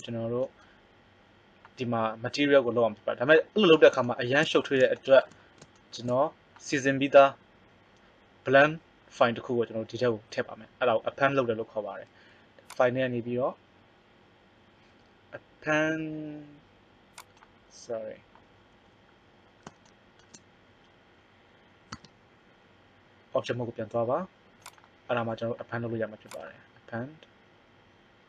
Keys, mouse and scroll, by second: 12.4 click, 21.9 Tab.